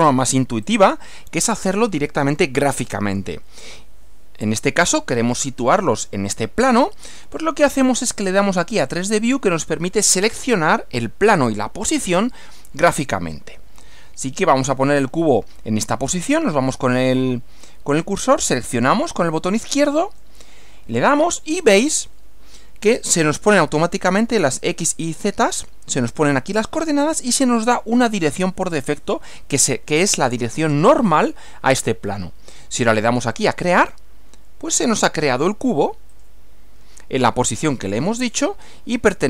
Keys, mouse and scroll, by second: 0.7 click, 8.9 click, 19.9 click, 33.8 click, 36.1 click, 38.0-39.2 middle drag.